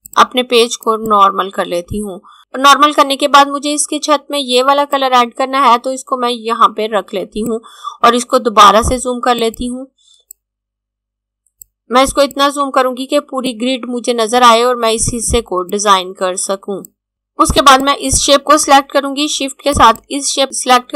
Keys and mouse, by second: 0.0 click, 4.8 click, 17.6 click, 19.6 shift+click.